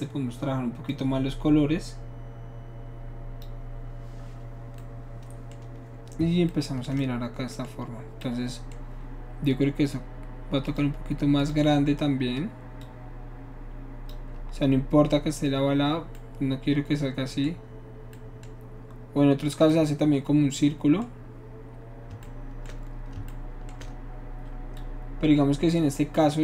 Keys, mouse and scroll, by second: 0.9-3.4 drag, 4.9-6.9 middle drag, 7.0-8.2 shift+middle drag, 10.7 click, 11.4 click, 12.8-14.1 drag, 15.3-20.0 middle drag, 24.8-26.4 shift+drag.